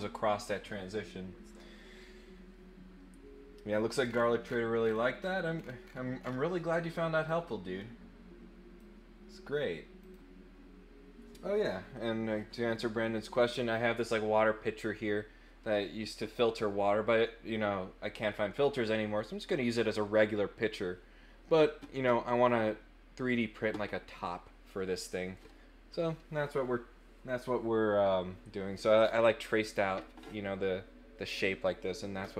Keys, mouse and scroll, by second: 4.0-4.5 scroll down 4, 4.8-5.3 scroll up 4, 5.5 scroll down 2, 5.8-6.3 scroll up 4, 7.2-8.8 drag, 10.0 click.